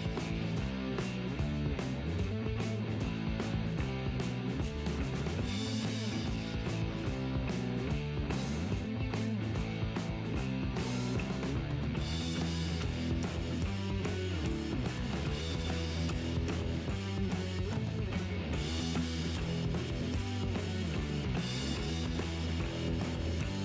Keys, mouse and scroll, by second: 1.2 g, 3.0-6.1 right drag, 6.5-8.4 middle drag, 8.5-11.5 right drag, 10.3 g, 11.2-12.5 middle drag, 14.3 g, 16.5-17.7 right drag, 16.8 middle click, 18.3 g, 20.2-21.3 middle drag, 21.3-22.5 drag, 22.5-23.6 right drag, 22.5 g.